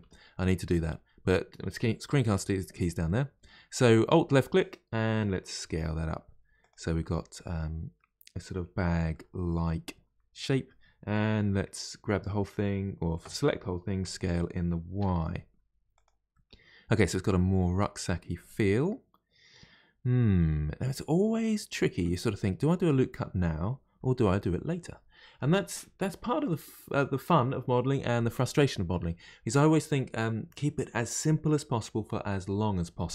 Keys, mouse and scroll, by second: 0.0 n, 3.0-5.6 middle drag, 5.6 s, 7.0-12.0 middle drag, 12.0 a, 16.3-19.3 middle drag.